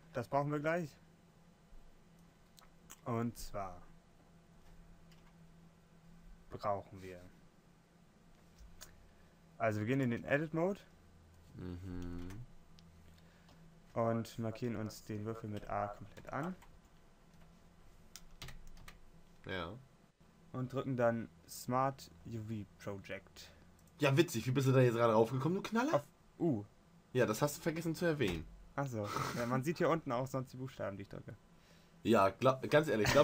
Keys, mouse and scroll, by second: 10.1 Tab, 14.0 a, 14.1 a, 16.9 u.